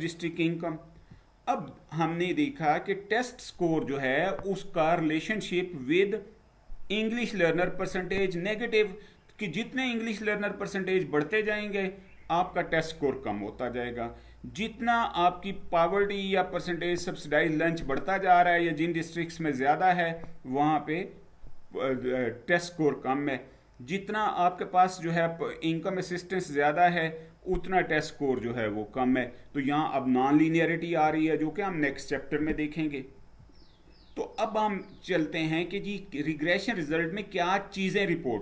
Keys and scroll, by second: 0.8 Down, 32.9 Down.